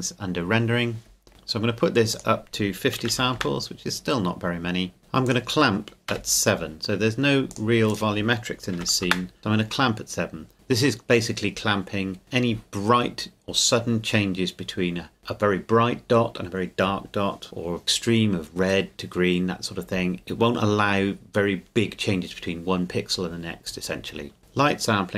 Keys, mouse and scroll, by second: 0.6 scroll down 1, 1.3-2.1 scroll up 1, 2.1 click, 3.0 KP_5, 3.1 KP_0, 3.4 KP_Enter, 5.2 click, 6.1 KP_7, 7.5 click, 8.7 KP_7, 9.0 KP_Enter, 10.5 click.